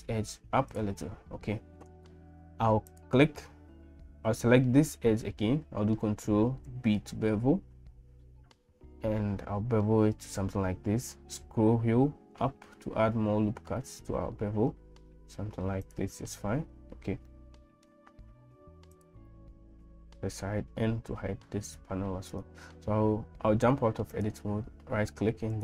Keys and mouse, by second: 6.7 ctrl+b, 17.3 middle click, 19.0 click, 20.4 n, 23.4 Tab, 24.1-25.6 drag.